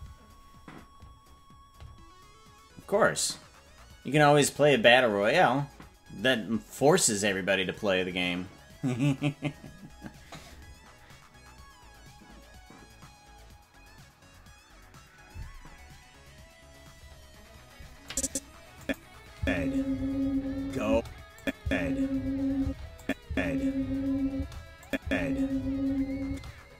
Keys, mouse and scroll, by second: 18.1 click, 18.8 click, 19.3 space, 20.9 space, 21.4 click, 21.6 space, 22.6 space, 23.0 click, 23.2 space, 24.3 space, 24.8 click, 25.0 space, 26.2 space.